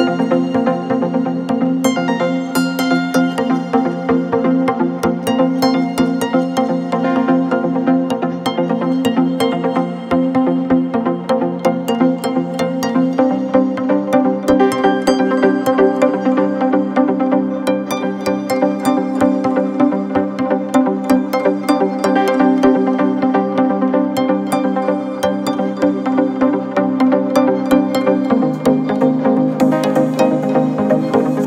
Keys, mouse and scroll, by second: 3.5-3.8 drag, 7.0-7.4 drag, 10.3 drag, 15.9 click, 19.5-20.3 drag, 20.5-21.8 drag, 23.3 click, 27.6-30.5 middle drag.